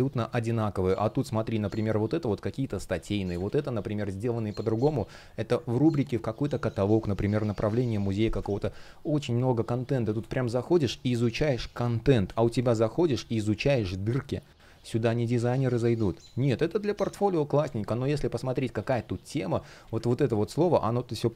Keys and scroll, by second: 1.2 shift+3, 2.6 space, 3.2 super+r, 8.1 space, 12.0 space, 17.3 space, 18.3 space, 20.1 shift+3, 21.1 super+r.